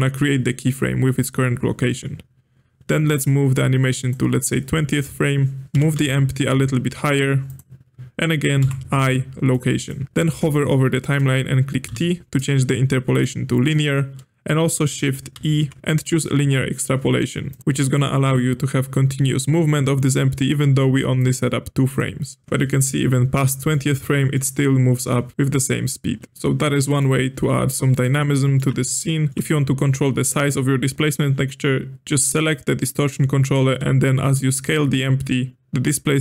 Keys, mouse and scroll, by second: 3.2-5.6 drag, 5.7 g, 8.5 i, 11.8 t, 15.3 shift+e, 21.1-22.4 drag, 23.9-25.3 middle drag, 25.3 click, 26.8-28.1 middle drag, 28.1 drag, 28.3-31.9 shift+middle drag, 29.3 click, 33.5 s.